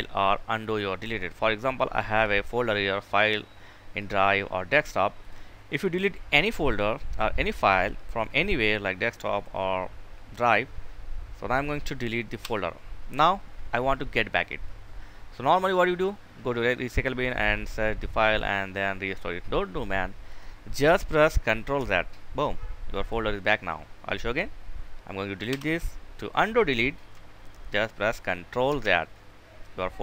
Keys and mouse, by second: 11.6 Delete, 19.5 click, 21.0 ctrl+z, 22.3 click, 24.8 Delete, 27.8 ctrl+z.